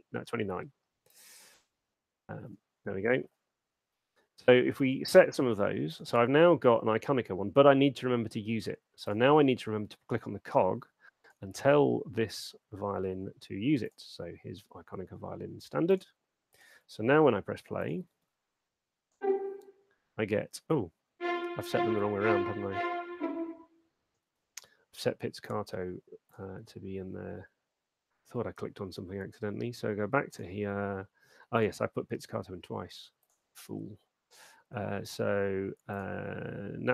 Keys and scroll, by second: 16.9 super+2, 18.4 alt+shift+space, 24.4 space.